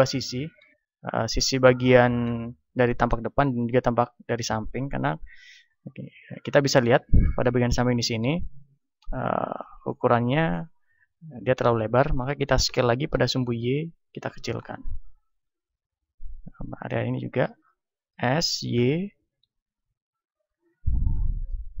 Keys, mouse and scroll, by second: 7.1-12.7 drag, 12.7 s, 14.9-18.0 drag, 16.8-18.8 right drag, 18.0 s, 20.3 click, 21.0-21.8 middle drag.